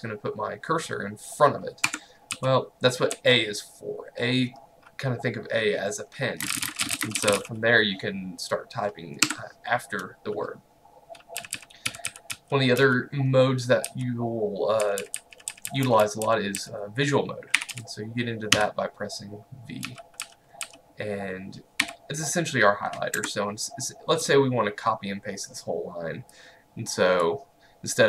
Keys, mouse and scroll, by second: 1.9 Escape, 2.4-3.7 typing, 6.5-7.9 typing, 9.3 Escape, 11.2-18.6 typing, 19.9-20.7 typing, 21.9 typing, 23.2 Escape, 26.4 click.